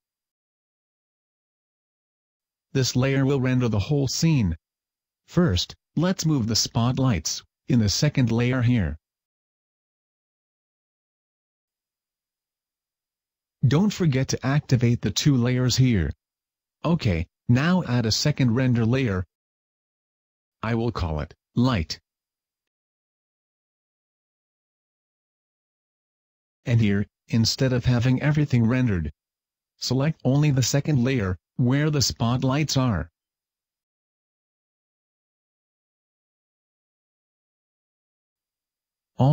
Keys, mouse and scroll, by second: 0.3 click, 8.5 shift+right click, 9.8 m, 15.6 shift+click, 20.6 click, 21.8 click, 27.1 click, 28.3 click, 31.4 click, 33.2 shift+click.